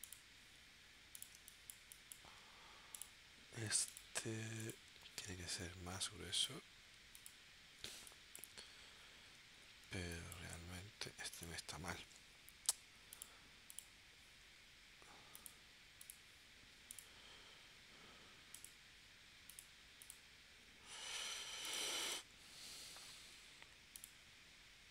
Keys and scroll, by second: 1.4 space, 7.9 space, 10.0 space, 23.3 a.